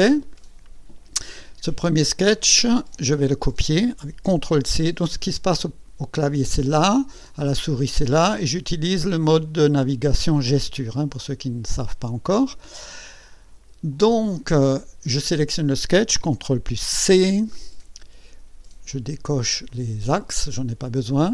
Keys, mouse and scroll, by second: 3.2 click, 9.3 click, 15.2 click, 16.9 ctrl+c, 19.7 click.